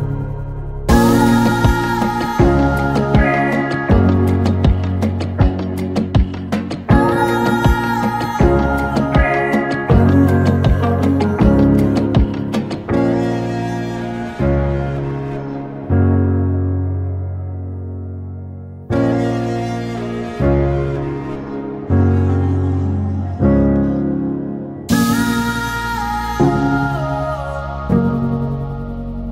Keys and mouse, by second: 1.2 click, 3.6 click, 4.3 click, 6.1 click, 6.6 click, 27.0 click, 27.7-28.3 middle drag.